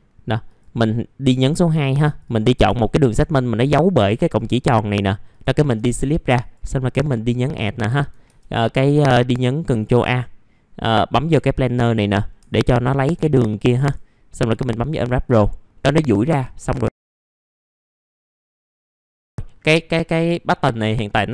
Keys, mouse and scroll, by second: 0.3 F3, 0.8 click, 4.1 F3, 4.7 middle click, 4.8-5.8 scroll down 1, 5.8 right click, 6.7 click, 12.7 click, 13.9 F3, 16.1 click, 17.0 middle click, 17.0-17.3 scroll down 1, 17.5 alt+middle click, 17.9 click, 18.8 click, 20.5 middle click, 21.2-21.3 scroll down 1.